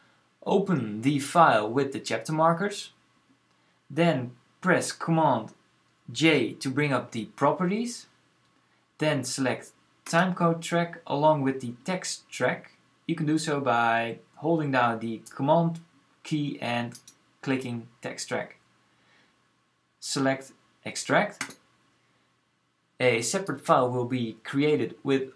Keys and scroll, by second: 6.0 super+j.